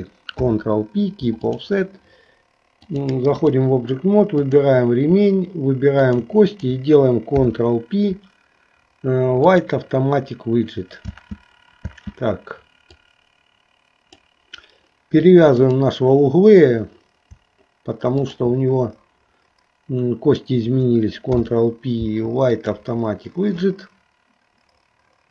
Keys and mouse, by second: 0.4 ctrl+p, 2.8 click, 4.5 click, 6.0 shift+click, 7.3 ctrl+p, 11.2 space, 12.1 space, 13.1-14.4 drag, 18.3 shift+click, 21.3 ctrl+p.